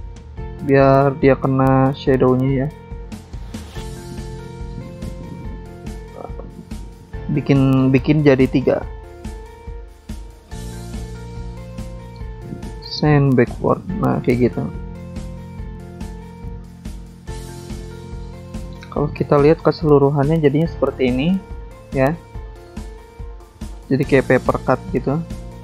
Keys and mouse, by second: 0.4 click, 2.5 click, 2.6 click, 2.7 click, 2.8 double click, 3.5 double click, 3.6 double click, 4.9 click, 6.5 click, 6.6 click, 7.0 click, 7.1 double click, 7.6 double click, 7.6 double click, 8.1 double click, 8.2 double click, 8.3 double click, 8.4 double click, 8.9 double click, 8.9 double click, 9.0 double click, 9.1 double click, 9.6 double click, 9.6 double click, 9.7 double click, 9.9 double click, 10.1 double click, 10.3 double click, 10.4 double click, 10.5 double click, 10.6 double click, 10.7 double click, 11.5 double click, 11.6 double click, 11.6 double click, 11.7 double click, 13.1 double click, 14.3 click, 14.4 click, 14.9 ctrl+click, 16.3 ctrl+c, 16.4 ctrl+v, 18.0 click, 20.8 click, 20.9 click, 21.4 click, 21.5 double click, 22.8 double click, 24.1 click.